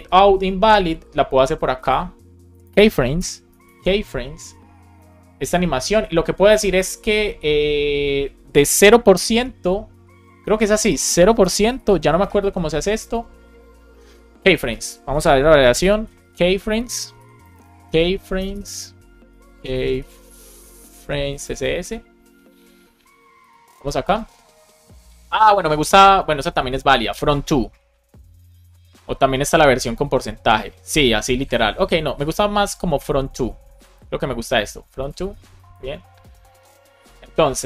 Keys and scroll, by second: 2.4 Return, 3.1 shift+2, 4.3 Return, 4.9 super+v, 5.3 Down, 10.4 BackSpace, 11.8 shift+;, 12.1 space, 12.4 shift+[, 12.7 BackSpace, 15.7 super+k, 17.1 super+l, 18.3 BackSpace, 20.9 Down, 21.2 space, 21.7 Return, 35.2 super+c, 36.1 BackSpace, 36.4 super+v.